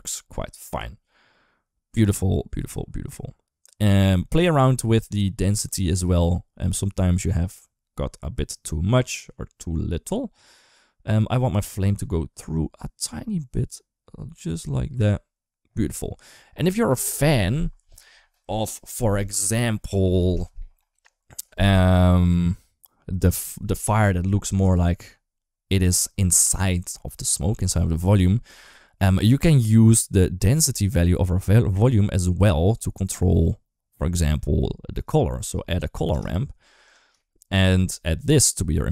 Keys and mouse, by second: 0.0 middle click, 0.6-3.8 drag, 4.0 middle click, 4.8 middle click, 5.8-14.8 drag, 15.6 middle click, 20.8 shift+middle click, 28.5 shift+middle click, 29.0 shift+middle click, 30.6 click, 30.9-36.7 drag, 37.0 shift+middle click, 37.9 click.